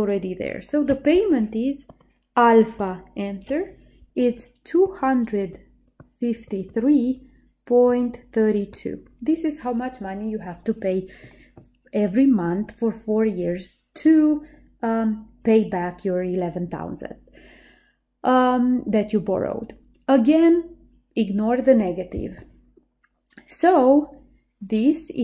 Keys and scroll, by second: 2.9 Return.